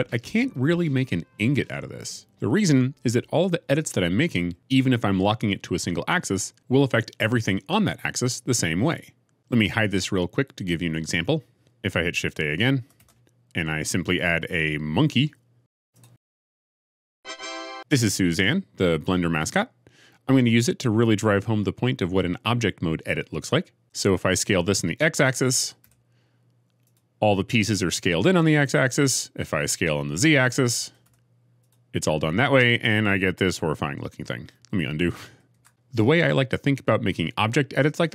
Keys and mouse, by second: 11.5 click, 12.9 shift+a, 25.5 s, 25.8 x, 26.7 click, 31.0 s, 31.0 z, 35.1 ctrl+z, 35.4 ctrl+z.